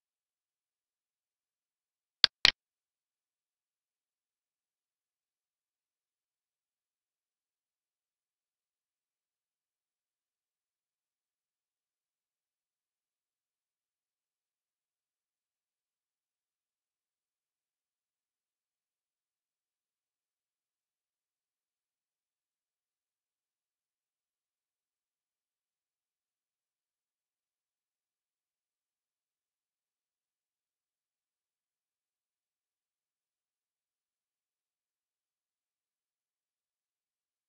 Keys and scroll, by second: 10.8 Left, 16.6 Right, 21.2 Right, 24.2 Left, 28.6 Right, 34.1 Right.